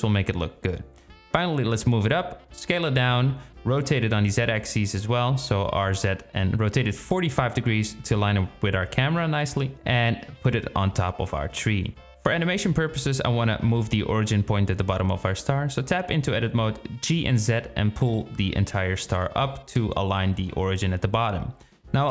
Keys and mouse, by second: 1.5 s, 2.4 g, 3.7 s, 4.2 g, 5.5 r, 13.0 Tab, 14.0 g, 17.4 Tab, 18.1 g.